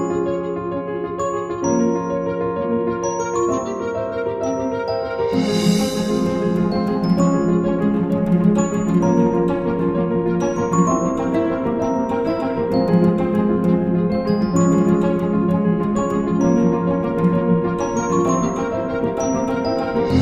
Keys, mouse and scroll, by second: 0.5 space.